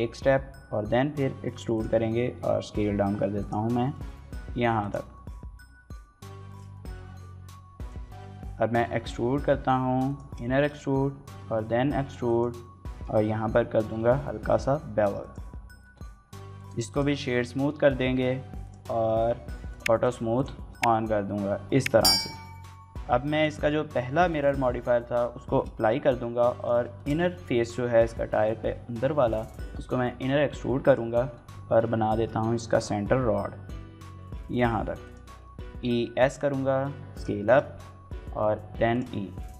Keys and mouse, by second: 1.5 click, 3.2 click, 3.6 shift+middle click, 3.9 s, 4.6 click, 4.9 middle click, 5.2 g, 5.4 y, 6.3 shift+click, 6.5 middle click, 6.9 s, 7.6 click, 7.8 middle click, 8.5 e, 8.7 s, 9.9 click, 10.3 shift+middle click, 10.5 middle click, 11.1 e, 12.1 click, 12.4 middle click, 13.6 ctrl+b, 15.0 click, 15.5 Tab, 16.4 right click, 17.2 shift+middle click, 17.4 middle drag, 19.5 click, 19.8 click, 20.2 click, 20.5 shift+middle click, 20.7-21.7 middle drag, 21.9 shift+middle click, 22.1 middle click, 24.4 ctrl+a, 25.3 shift+middle click, 25.6 Tab, 26.2 3, 26.4 click, 26.8 shift+middle click, 27.0 middle click, 30.6 click, 31.2 middle click, 32.0 shift+middle click, 32.3 middle click, 34.9 click, 35.4 e, 35.7 s, 37.0 click, 37.2 shift+middle click, 37.4 middle click, 37.7 e, 38.7 click, 39.0-39.5 typing.